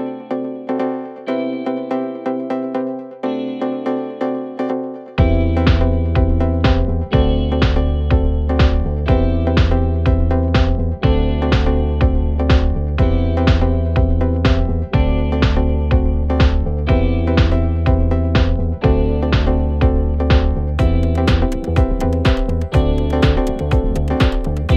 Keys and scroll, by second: 6.9 9, 7.1 Return, 11.8 3, 12.1 ], 17.8 ], 20.2 ], 21.4 4.